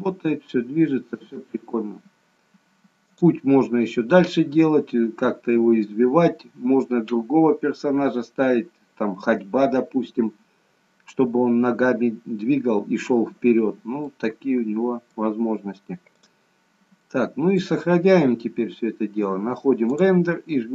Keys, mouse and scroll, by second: 3.2 click, 7.3-8.0 scroll down 1, 8.0-11.2 scroll down 1, 14.1 middle click, 15.4-16.3 scroll down 1, 16.3 click, 16.3-17.2 scroll down 2, 17.2 middle click, 17.2-19.3 scroll down 1, 20.0 click.